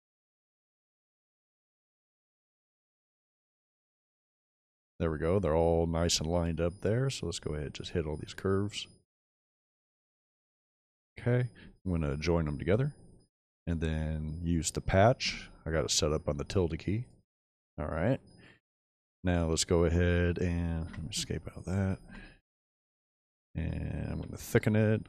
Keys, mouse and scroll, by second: 0.0 shift+z, 12.5 j, 16.9 right click, 17.7-18.2 middle drag, 18.7 click, 20.8 Escape, 22.5 click, 24.0 shift+t.